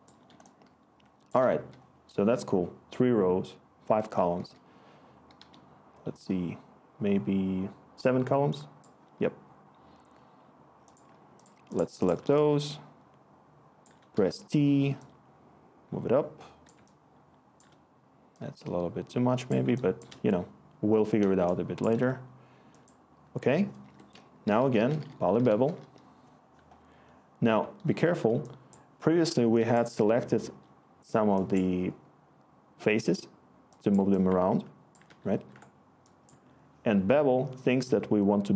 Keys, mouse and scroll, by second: 4.3-5.8 typing, 14.1 t, 23.8 Tab, 24.2-25.5 typing, 25.5 Return, 35.0 ctrl+z.